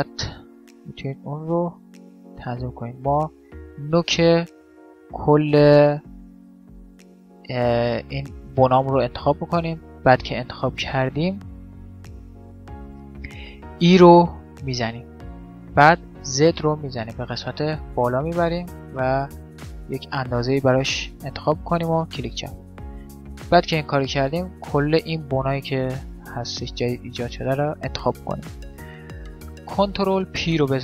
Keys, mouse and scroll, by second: 1.4 click, 1.4-2.5 middle drag, 2.5-6.0 right drag, 9.3-13.9 middle drag, 13.7 e, 22.6-24.5 middle drag, 24.5 right click, 25.4 click, 25.4 middle click, 25.5 right click, 27.6-28.7 drag, 27.6-29.5 middle drag, 28.7 right click, 29.5 alt+p.